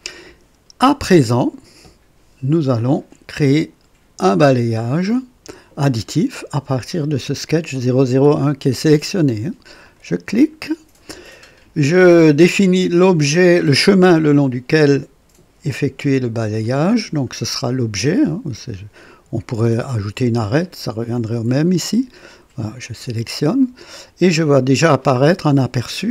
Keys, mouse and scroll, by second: 9.8 click, 21.1 click, 22.8 click, 24.9-26.1 drag.